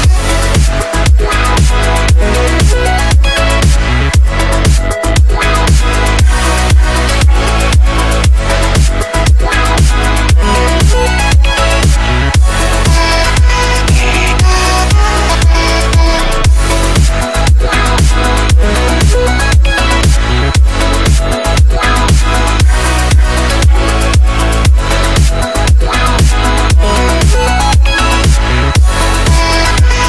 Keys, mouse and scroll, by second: 0.5 F10, 0.9-7.7 drag, 9.3-12.1 typing, 13.5-15.3 drag, 15.9 Delete, 16.8 click, 17.9-19.9 typing, 19.9 Return, 21.2-24.0 drag, 24.9 Delete, 26.3 click, 27.4-29.5 typing.